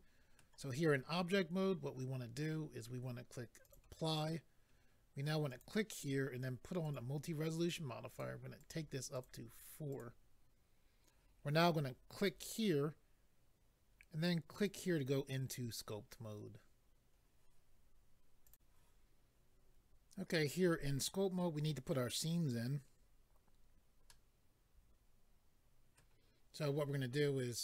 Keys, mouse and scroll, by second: 3.6 click, 3.7 click, 5.5 click, 5.6 click, 6.8 click, 6.9 click, 8.1 click, 8.2 click, 8.6 click, 8.7 click, 9.1 click, 9.3 double click, 9.9 double click, 10.0 double click, 12.2 click, 12.3 click, 14.5 click, 14.7 click, 18.4 click, 19.7 click, 24.1 middle click.